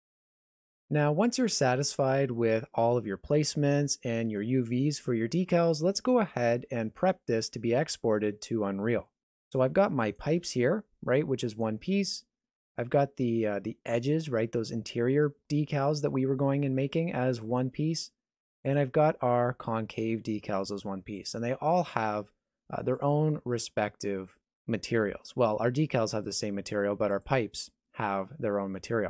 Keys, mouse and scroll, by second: 10.0 right click, 10.4 g, 12.7 click, 13.4 g, 18.6 click, 19.4 g, 23.0 click, 27.1 click.